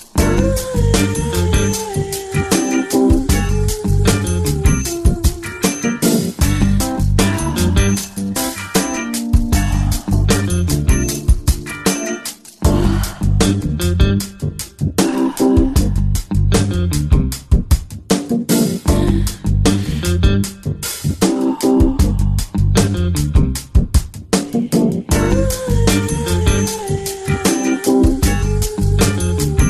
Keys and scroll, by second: 1.3-3.6 typing, 4.9 space, 6.6 space, 7.0 space, 7.1 space, 7.8 space, 8.9-10.5 typing, 11.8 space, 12.2 space, 13.0 space, 14.0-18.7 typing, 19.9-23.7 typing, 25.1 space, 25.2 space, 25.9 space, 26.0 space, 28.1-29.6 typing.